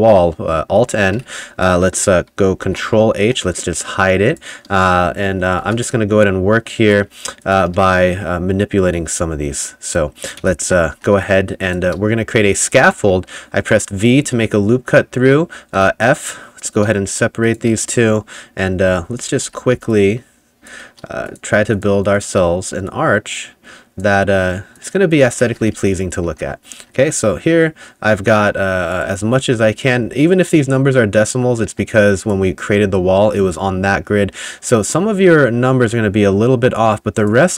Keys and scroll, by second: 0.8-2.0 typing, 2.7 ctrl+h, 3.3 2, 5.7 t, 7.8 a, 10.4 v, 11.0 2, 14.3 w, 15.8 f, 18.9 ], 19.5 [, 19.8 ], 25.0-26.8 typing, 31.7 a.